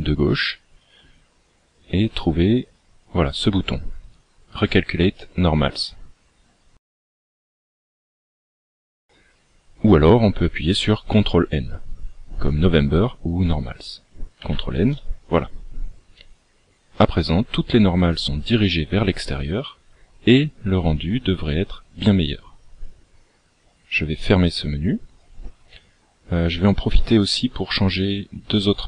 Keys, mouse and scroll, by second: 14.7 ctrl+n, 24.4 click.